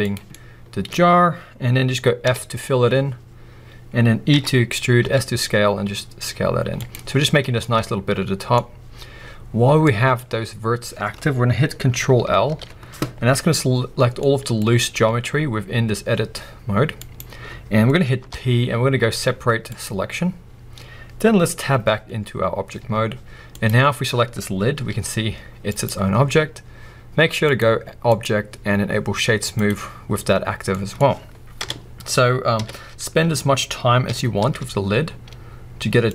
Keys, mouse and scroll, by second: 0.1 click, 0.3-2.0 middle drag, 3.2 f, 5.2 e, 6.9 click, 7.3-7.6 scroll down 2, 7.6 middle click, 8.6 scroll up 2, 9.8 middle click, 10.2 scroll up 1, 12.4 ctrl+l, 13.6-14.2 scroll down 2, 14.2 middle click, 14.8 scroll down 2, 15.0 g, 17.2 right click, 18.2 p, 22.9 Tab, 23.5 click, 23.8-24.7 scroll down 1, 24.7 g, 25.8 right click, 26.0-26.6 scroll up 1, 27.4 click, 28.0-30.7 drag, 30.4-30.7 scroll down 1, 30.7-36.1 middle drag, 31.6 KP_4, 32.6 KP_1, 33.1 scroll up 1, 34.0 g.